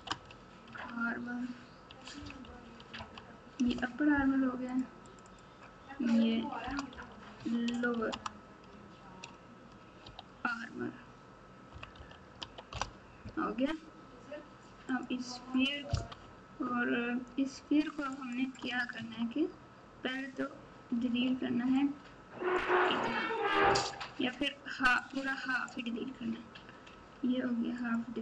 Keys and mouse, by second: 5.1 click, 5.2-12.7 drag, 14.8 click, 16.1 KP_Multiply, 18.9 Tab, 21.0 alt+z, 21.8 click, 25.1 click, 26.9 x.